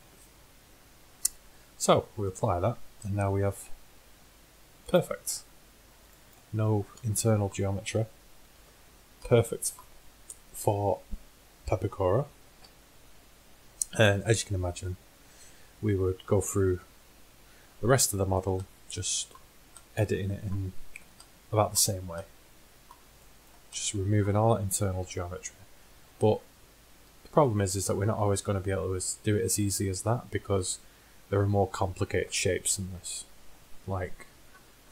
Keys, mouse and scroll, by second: 2.3-4.3 drag, 4.3 g, 8.6 z, 11.8 middle click, 12.6 KP_1, 15.9-18.2 middle drag, 21.0 Tab, 25.1 KP_1, 26.4 middle click, 28.5-30.4 middle drag, 30.4-31.6 drag, 31.6-34.9 middle drag.